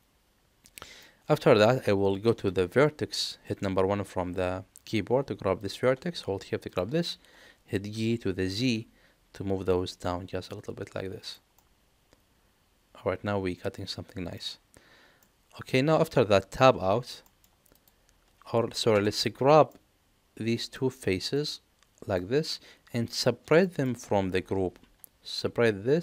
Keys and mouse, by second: 2.0 1, 5.6 click, 7.9 g, 11.5-14.3 middle drag, 15.2 middle click, 16.6 Tab, 17.2 shift+middle drag, 17.7 click, 19.7 Tab, 19.7-20.7 middle drag, 21.5 click, 22.5 middle click, 23.6 shift+middle click.